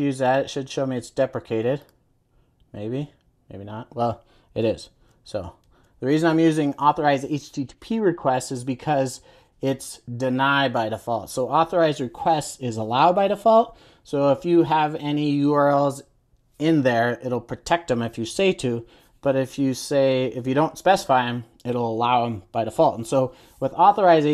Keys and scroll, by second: 5.0 super+z.